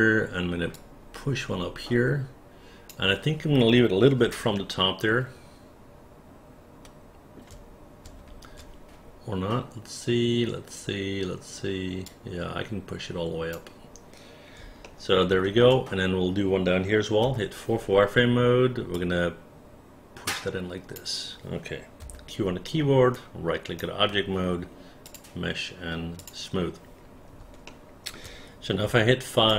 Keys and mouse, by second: 0.8-3.0 drag, 4.7-7.5 alt+middle drag, 8.4 ctrl+z, 12.1-13.6 drag, 14.9 alt+middle click, 17.3 4, 19.1-21.1 drag, 22.1 q, 27.8 alt+middle click, 28.9 5.